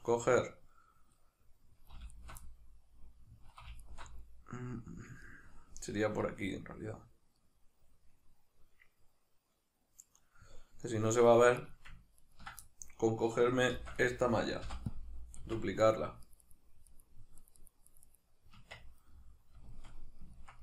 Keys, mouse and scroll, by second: 2.1 alt+shift+right click, 2.5-3.8 middle drag, 3.8 alt+shift+right click, 5.3-11.6 middle drag, 11.6 right drag, 12.2 ctrl+right click, 12.7-14.1 middle drag, 13.7 shift+d, 14.1 right click, 14.7 p, 15.4 Tab, 15.8 right click, 16.3 right click, 16.4 right click, 16.9 right click, 17.4 right click, 17.6 right click, 17.9 right click, 18.0 right click, 18.6 Tab, 19.1-20.6 middle drag.